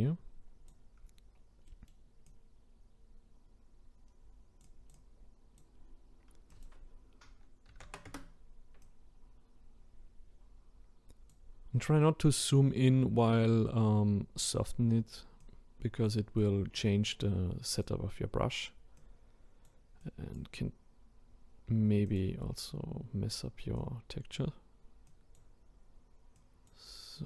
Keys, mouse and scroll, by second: 1.3-1.7 scroll up 1, 1.7-2.3 middle drag, 2.3-11.8 drag, 12.1-13.0 scroll up 2, 13.0-14.4 scroll down 2, 14.4-27.2 drag.